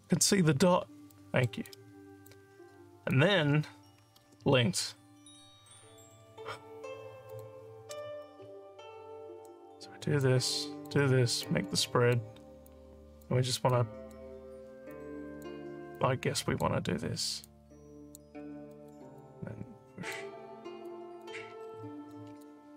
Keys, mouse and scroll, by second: 1.2 alt+middle click, 1.7 alt+click, 2.8 scroll down 2, 3.1 alt+click, 7.3 click, 8.2-9.5 drag, 10.3 click, 11.5 click, 12.7 click, 13.7 click, 14.9 click, 16.0 click, 17.5 click, 18.7 alt+middle click, 19.2 click, 20.9 click, 21.7 alt+click, 22.4 click.